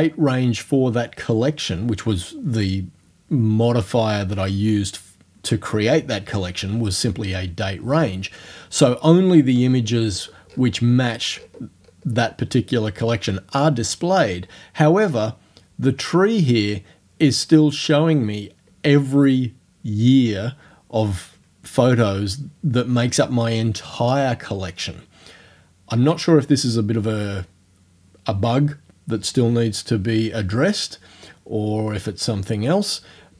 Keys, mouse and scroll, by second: 8.8-10.4 scroll down 6, 10.5-12.3 scroll up 6.